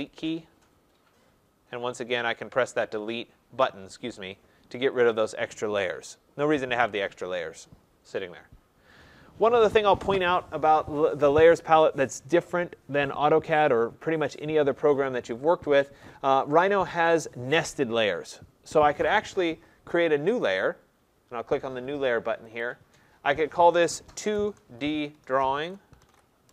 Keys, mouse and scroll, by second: 0.1 click, 3.1 click, 5.0 click, 9.0 click, 14.0 click, 22.6-26.1 drag, 24.2-26.1 typing, 26.4 Return.